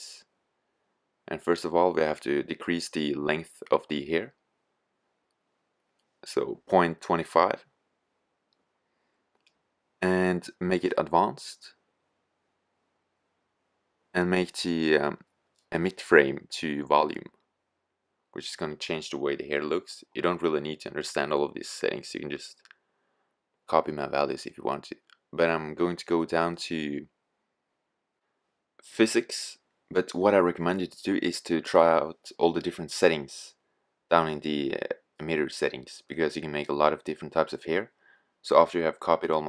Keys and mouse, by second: 2.6 click, 15.5-16.7 drag, 16.7 middle click, 17.0 middle click.